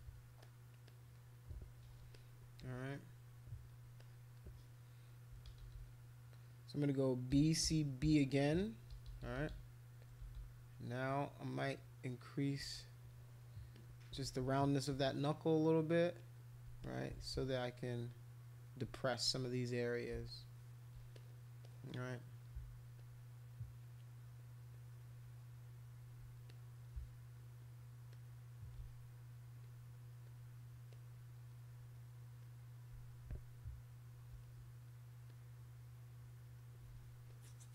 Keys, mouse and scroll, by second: 0.1 ], 0.4 click, 0.9 click, 2.1 click, 4.0 click, 5.3 [, 5.5 [, 5.6 [, 5.7 [, 7.0-10.4 typing, 11.8 click, 13.7 click, 15.3 click, 15.8 click, 16.2 click, 16.8 alt+click, 17.6-18.7 alt+drag, 18.9 click, 19.7 alt+click, 19.9 alt+click, 20.2 shift+click, 21.2 click, 21.6 click, 23.0-24.3 shift+drag, 24.4 shift+click, 24.7-25.8 shift+drag, 26.5 click, 26.9 scroll up 3, 28.1 shift+click, 29.6 alt+click, 30.2 alt+click, 30.9 alt+click, 32.4 alt+click, 35.3 click, 37.3 click.